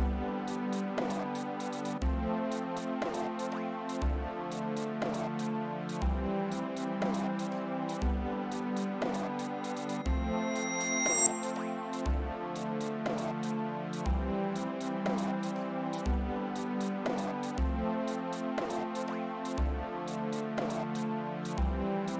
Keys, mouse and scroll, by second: 0.0 click, 1.5 click, 2.5 click, 8.9 d, 9.9-11.3 drag, 12.9 click, 15.7 click, 17.1 click, 19.1 click, 19.9 click.